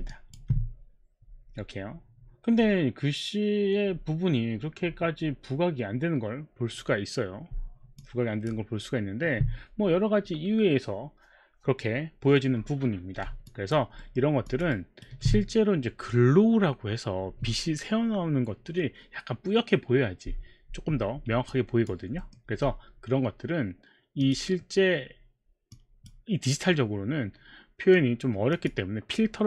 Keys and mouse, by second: 0.1 alt+click, 7.9 alt+click, 13.5 alt+click, 13.9 alt+middle click, 14.5 alt+click, 14.7 alt+right click, 21.5 alt+click, 22.1 alt+middle click, 24.2 click, 25.8 click, 28.5 click.